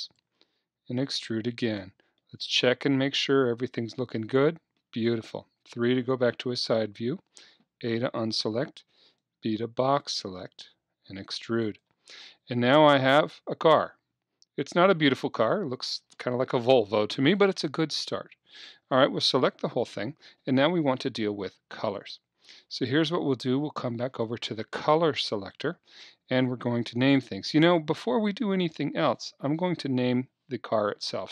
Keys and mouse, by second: 0.2-3.9 drag, 0.4 e, 3.9 middle click, 5.4 KP_3, 6.7 a, 8.8 b, 10.5 e, 11.8-13.7 drag, 15.3-18.9 middle drag, 18.6 a, 18.9 a, 22.0-24.0 drag, 24.3-31.3 drag.